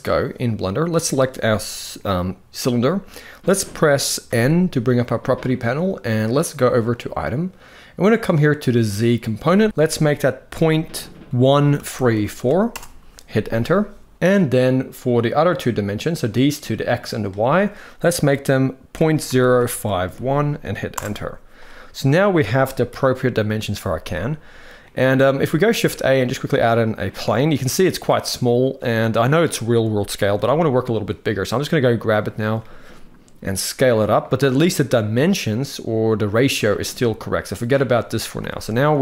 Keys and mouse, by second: 0.6 click, 4.0 n, 6.6 click, 8.6-12.4 drag, 9.7 ctrl+z, 16.0-20.7 drag, 22.6 KP_1, 24.5-25.0 middle drag, 25.4 shift+a, 30.1 s, 33.2-33.8 middle drag, 38.1 n, 38.6-39.0 middle drag.